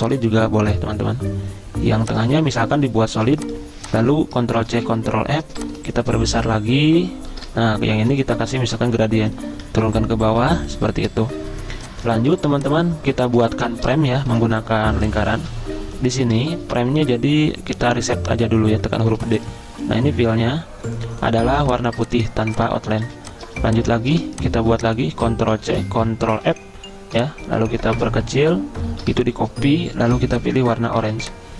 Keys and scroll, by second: 3.2 v, 4.6 ctrl+c, 4.9 ctrl+f, 8.1 i, 9.6 ctrl+[, 12.4 v, 14.4 l, 16.6 v, 17.7 d, 23.0 z, 24.1 v, 25.6 ctrl+c, 26.4 ctrl+f, 30.1 i, 31.0 z.